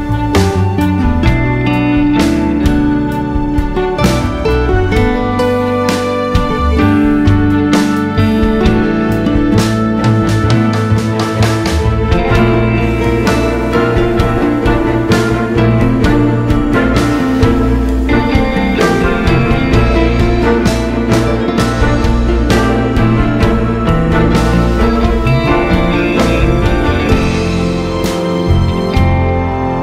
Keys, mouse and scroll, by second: 2.2 click, 3.7 alt+r, 4.1 scroll up 1, 4.9-5.5 scroll down 2, 5.8 scroll up 1, 6.4 scroll up 1, 7.6 scroll down 1, 8.1 scroll down 1, 10.3 a, 11.4 scroll up 1, 12.1 click, 12.9 scroll up 1, 13.3 KP_Decimal, 13.5 scroll up 1, 14.9 click, 15.6 alt+click, 16.1 o, 16.8 click, 17.6 o, 18.1 g, 19.2 right click, 20.7 click, 21.3 Tab, 21.7 g, 22.3 right click, 22.5 o, 22.9 g, 26.7 right click, 28.7-29.8 drag, 29.4 g.